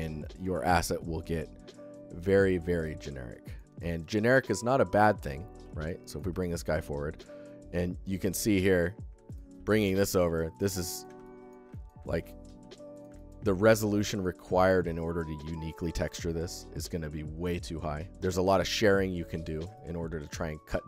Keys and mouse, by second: 0.3-3.4 alt+shift+middle drag, 3.8-4.4 alt+shift+middle drag, 5.0 click, 5.5 middle click, 5.6 middle click, 5.9 click, 6.1 g, 6.1 middle click, 6.6 click, 7.0 click, 8.2 click, 9.1 click, 10.3 click, 10.7 alt+shift+drag, 11.1 ctrl+alt+click, 11.5 alt+shift+middle drag, 11.8 ctrl+alt+middle drag, 12.8 click, 13.0 alt+shift+drag, 13.7 g, 13.9 click, 18.4 alt+click, 19.2 ctrl+alt+drag, 19.4 alt+middle drag, 19.6-20.1 alt+shift+middle drag, 20.2 middle click.